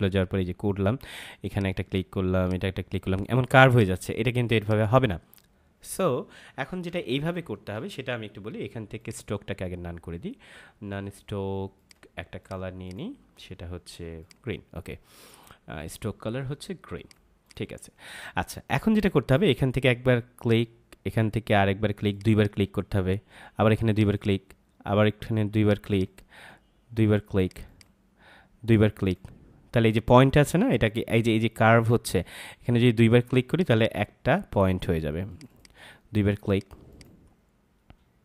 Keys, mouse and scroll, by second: 6.7 ctrl+z, 8.9 click, 11.7 click, 16.9 click, 20.3 click, 33.5 click.